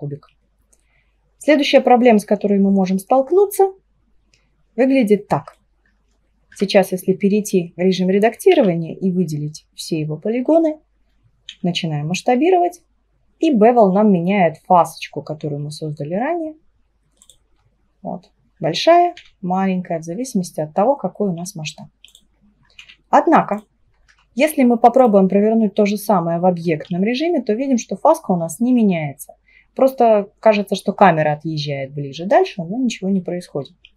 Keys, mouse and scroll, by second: 1.7-2.9 scroll down 3, 2.9-5.9 middle drag, 5.9-6.6 scroll up 2, 6.6 Tab, 8.6 a, 11.6 s, 17.6-19.2 scroll up 6, 19.2 s, 22.4-22.8 scroll down 1, 22.8 s, 24.2 Tab, 25.0 click, 26.9 s.